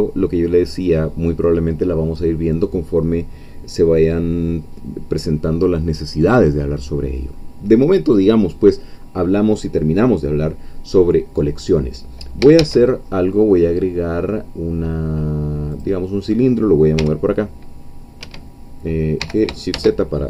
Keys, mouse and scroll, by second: 12.6 shift+a, 15.7-17.0 drag, 17.0 g, 18.2 Escape, 19.2 g, 19.8 shift+z.